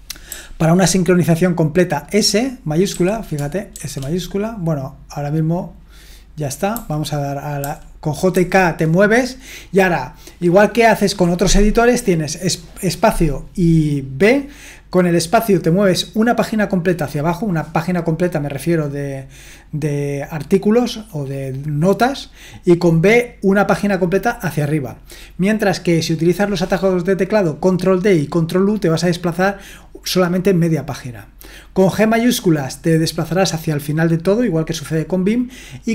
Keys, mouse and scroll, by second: 0.3 typing, 2.9-3.7 typing, 6.7-8.3 typing.